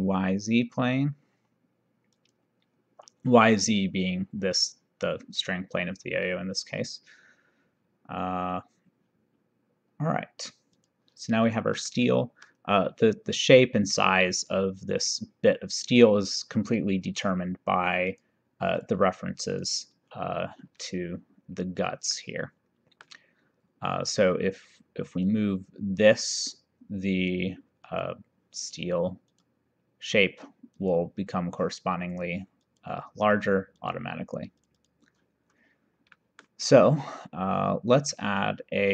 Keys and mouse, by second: 2.2 click, 10.8 click, 11.9 middle click, 18.1 click, 22.2 middle click, 25.3 click, 28.0 click, 29.3 click, 30.9 click, 32.7 click, 33.9 click, 36.1 middle click, 38.0 click.